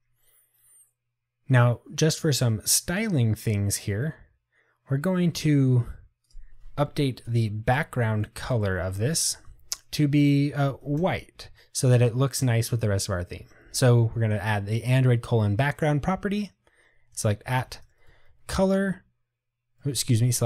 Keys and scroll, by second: 11.5 Tab.